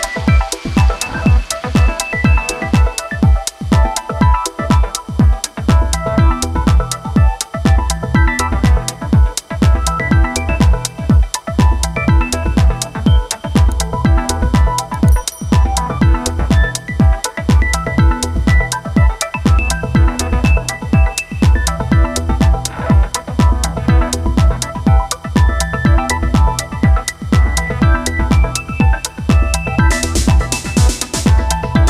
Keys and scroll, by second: 14.6 space, 25.6 space, 30.4 ctrl+z, 31.2 shift+x.